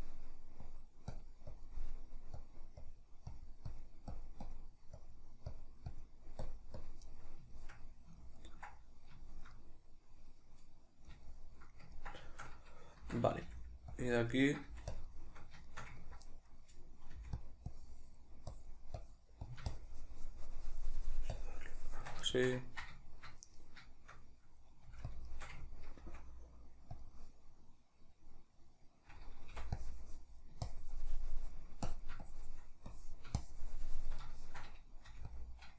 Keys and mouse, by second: 0.6-1.8 drag, 1.8 middle click, 2.4-7.1 drag, 7.1-14.1 middle drag, 13.0 shift+c, 13.5 f, 14.1 click, 14.3 ctrl+middle click, 14.7 f, 15.0 shift+click, 15.1-17.5 shift+middle drag, 17.1 f, 17.7-22.3 drag, 22.3-25.2 shift+middle drag, 24.9 f, 25.2 shift+click, 25.3-27.1 shift+middle drag, 26.0 f, 27.1 click, 29.5 typing, 29.8-34.2 drag, 34.2-35.4 shift+middle drag, 35.0 f, 35.4 click.